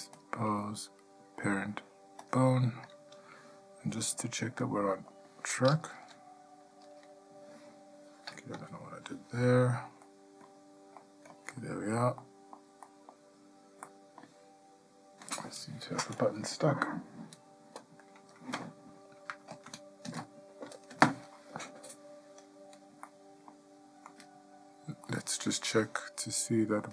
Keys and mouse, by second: 0.4-2.5 drag, 4.8-5.3 ctrl+shift+middle drag, 6.2 shift+KP_Decimal, 10.2-10.6 ctrl+shift+middle drag, 11.2-11.5 ctrl+shift+middle drag, 11.8-12.2 shift+middle drag, 12.4-12.7 shift+middle drag, 13.0-13.5 shift+middle drag, 14.0-14.4 shift+middle drag, 23.2-23.7 middle drag, 24.3-25.2 shift+middle drag.